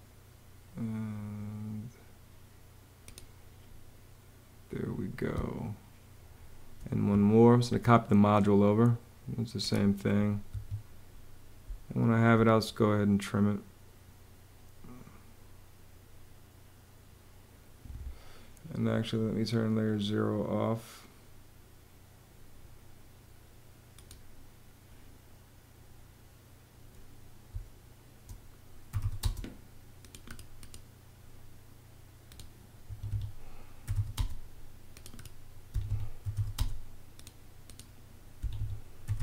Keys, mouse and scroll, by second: 5.1 space, 10.2 Escape, 11.4 space, 27.2 space, 28.4-29.2 typing, 32.5 Escape, 33.3-34.1 typing, 35.4 Escape, 35.7-36.6 typing, 38.1-39.2 typing.